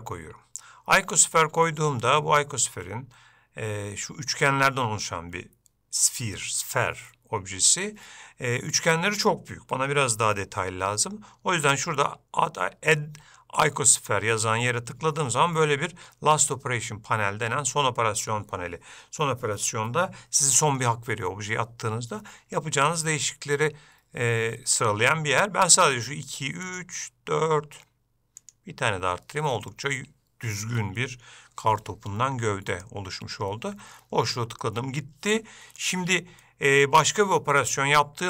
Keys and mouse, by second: 1.8-2.8 ctrl+middle drag, 14.1-15.2 drag, 26.0 click, 28.5 click, 32.9-34.8 drag, 34.8 middle click, 36.6 middle click.